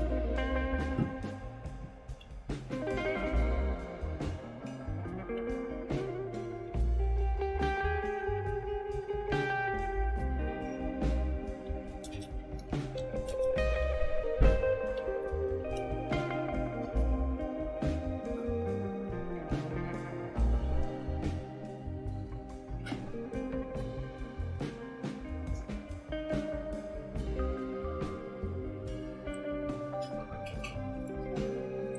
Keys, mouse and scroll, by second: 0.0-0.8 typing, 2.2-3.9 typing, 4.4 Tab, 5.1-7.7 typing, 12.1-15.6 typing, 15.7 Return.